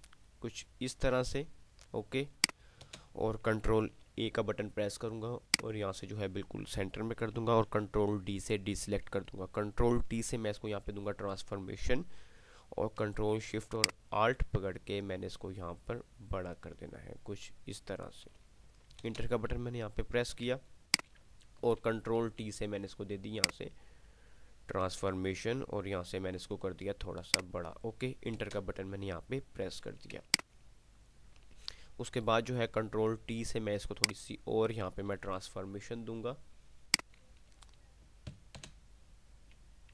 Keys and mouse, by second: 4.1 ctrl+a, 5.6 click, 8.0 ctrl+d, 10.8 ctrl+t, 14.0-18.5 ctrl+alt+shift+drag, 21.3 alt+space, 22.1 ctrl+t, 23.6-27.0 alt+shift+drag, 31.0 ctrl+space, 31.6 ctrl+click, 32.1 ctrl+space, 32.6 ctrl+t, 34.1 click, 35.6 ctrl+t, 37.1 click.